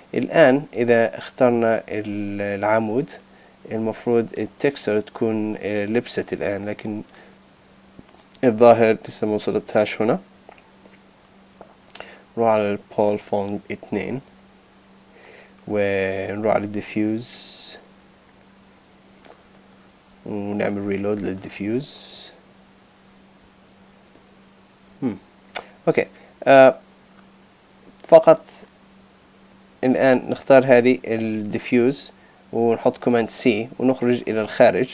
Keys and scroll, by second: 3.9 super+z, 30.2 super+a, 32.6 super+c.